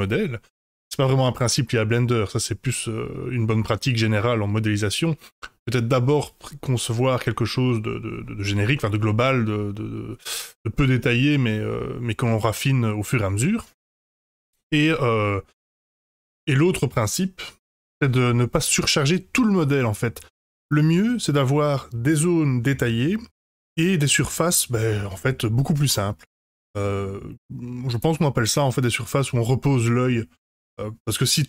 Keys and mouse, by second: 8.7-10.7 middle drag, 14.4-16.4 middle drag, 17.6 F5.